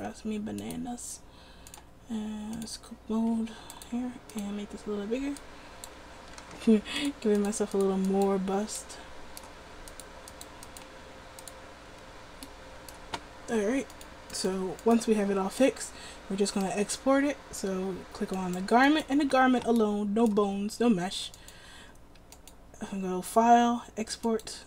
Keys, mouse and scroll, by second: 6.7 ctrl+z.